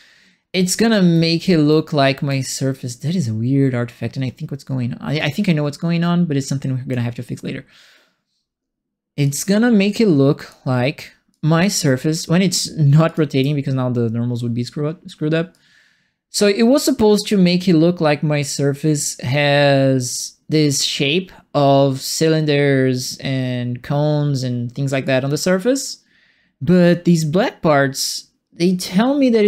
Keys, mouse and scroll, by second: 0.5-2.2 right drag, 0.6 s, 1.4 s, 2.4-6.9 drag, 9.2-10.4 drag, 11.3 click, 13.0 alt+click, 15.5-23.0 drag, 25.0-26.8 drag, 28.1-29.4 drag.